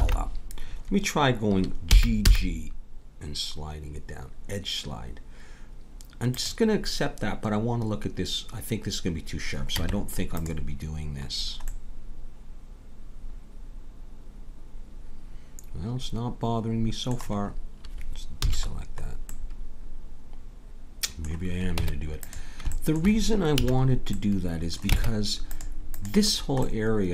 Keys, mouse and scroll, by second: 0.0 ctrl+z, 1.9 g, 9.7 Tab, 10.5 Tab, 18.4 a, 21.8 Tab, 23.6 a, 25.0 ctrl+Tab.